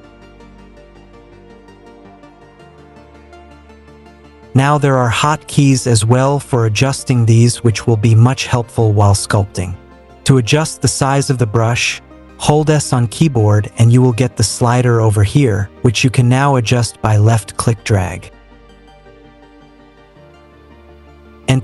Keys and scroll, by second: 12.2 s.